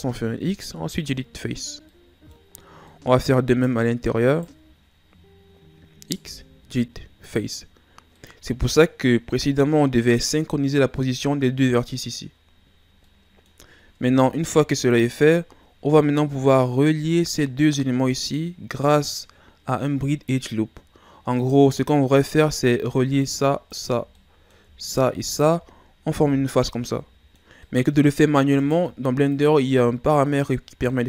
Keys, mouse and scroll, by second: 1.7 scroll down 2, 1.9-2.5 middle drag, 2.5-2.9 scroll up 2, 2.9 middle click, 3.4 right click, 4.3 shift+right click, 6.2 x, 7.9 scroll down 2, 8.1-9.4 middle drag, 9.4 scroll up 2, 10.0-14.0 middle drag, 14.0 ctrl+Tab, 15.3-18.3 middle drag, 21.4 right click, 21.7 middle click, 22.6-23.2 scroll down 2, 23.2 right click, 23.7 shift+right click, 24.2 middle click, 24.9 shift+right click, 25.3 shift+right click, 26.1 f, 26.6-28.6 middle drag, 28.6 shift+right click, 29.3 shift+right click, 30.0-31.0 middle drag.